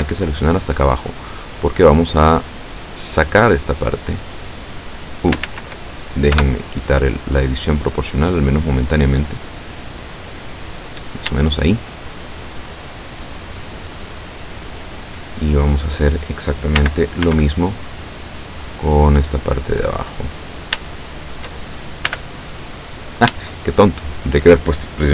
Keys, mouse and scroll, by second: 0.0 b, 0.4-1.5 drag, 2.5-5.3 drag, 5.6 ctrl+z, 6.5 o, 7.1-11.2 drag, 11.5-15.3 shift+middle drag, 15.3 shift+scroll up 2, 16.2 scroll down 2, 16.9 a, 17.3 b, 17.9 scroll down 2, 18.7-20.5 drag, 21.0 shift+middle click, 22.2 a, 23.6-24.7 shift+middle drag.